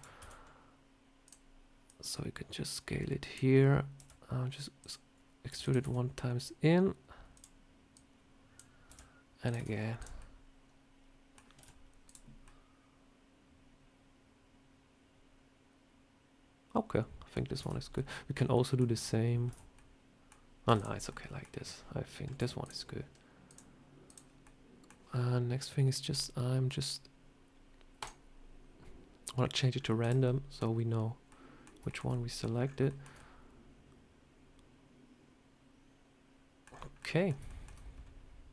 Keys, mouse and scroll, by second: 0.1 s, 1.8 click, 3.9 e, 5.4 e, 5.7 s, 7.8 click, 8.8 e, 9.5 Tab, 9.6 scroll down 3, 9.9 click, 10.1 middle click, 11.5 z, 12.3 middle click, 17.5 Tab, 17.7 scroll up 2, 17.8 middle click, 18.4 middle click, 18.8 Tab, 19.4 Tab, 19.7 middle click, 20.6 Tab, 20.7 click, 21.0 middle click, 22.3 z, 23.4 click, 24.3 middle click, 26.0 click, 29.6 scroll down 2, 29.9 click, 30.1 middle click, 31.2 middle click, 31.8 shift+middle click, 32.0 middle click, 32.5 scroll up 4, 32.8 shift+middle click, 33.0 scroll down 1, 33.0 middle click, 36.5 scroll down 5, 36.8 scroll up 1, 36.9 middle click, 37.2 scroll down 1, 37.3 shift+middle click, 37.9 scroll up 2, 38.0 scroll down 1.